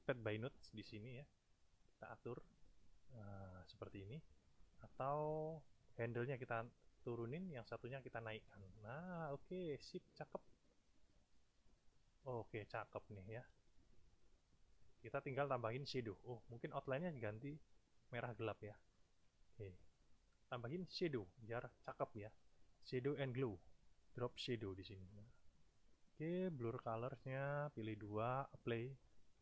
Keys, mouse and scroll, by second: 2.0-3.5 drag, 4.3 click, 5.5-7.2 drag, 7.8 click, 9.3-10.5 drag, 11.1-12.4 drag, 13.6 space, 14.2 click, 15.2 click, 17.5 shift+click, 18.6 shift+click, 20.9 click, 23.8 click, 26.9 click, 28.5 click.